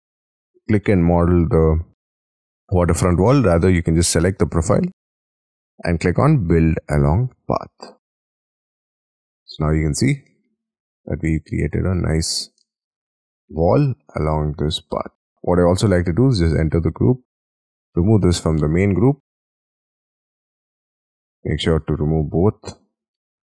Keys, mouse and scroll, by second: 0.1 ctrl+shift+scroll down 10, 0.4 ctrl+shift+scroll up 2, 0.9 ctrl+shift+scroll down 4, 1.1-1.6 ctrl+shift+scroll up 9, 2.0 ctrl+shift+click, 3.0-3.6 scroll down 12, 3.8-4.4 scroll up 5, 4.4-8.1 scroll down 13, 8.1 scroll down 1, 8.3 scroll up 4, 8.7 middle click, 9.2 middle click, 9.7-10.2 scroll up 14, 10.2 middle click, 11.0-11.6 scroll up 5, 11.6 scroll down 5, 11.8 j, 12.2-12.6 scroll down 5, 12.6 middle click, 13.8-15.1 scroll down 13, 15.1 scroll down 1, 15.3 scroll up 10, 16.2 double click, 16.6 double click, 17.5 double click, 18.2 ctrl+x, 19.1 Escape, 19.4 Escape, 19.8 middle click, 21.3 ctrl+z, 21.5 ctrl+scroll up 4, 21.9 ctrl+z, 22.8 ctrl+z.